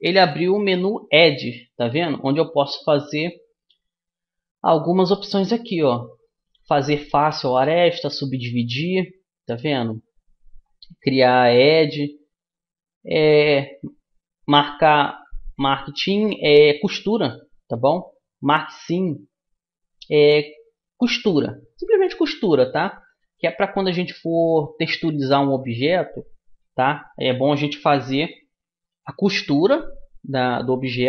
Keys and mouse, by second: 29.1 ctrl+e.